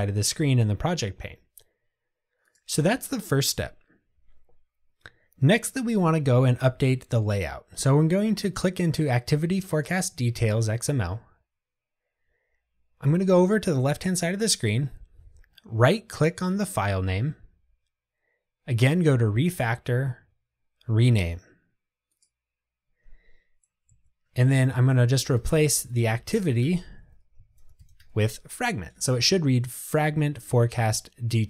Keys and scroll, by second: 9.9 super+b, 22.4 shift+F6, 25.2 Delete.